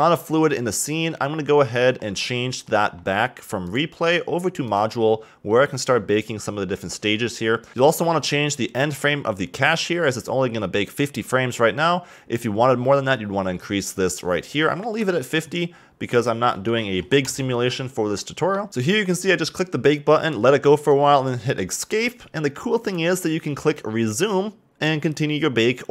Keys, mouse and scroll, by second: 1.5-3.6 scroll down 38, 3.6-6.6 drag, 7.2-7.7 scroll down 3, 16.1 click, 18.1 middle click, 18.5 scroll up 4, 18.7-23.9 drag.